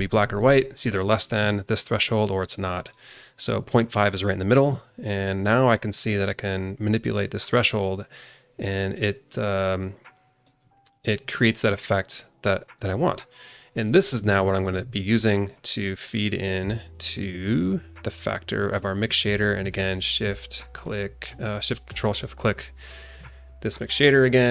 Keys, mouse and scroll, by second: 2.6 click, 4.8-10.5 shift+drag, 10.8-13.7 shift+drag, 14.0 scroll down 1, 14.4 alt+shift+middle click, 15.5 drag, 16.9-18.7 drag, 21.0 ctrl+shift+click, 23.9 click.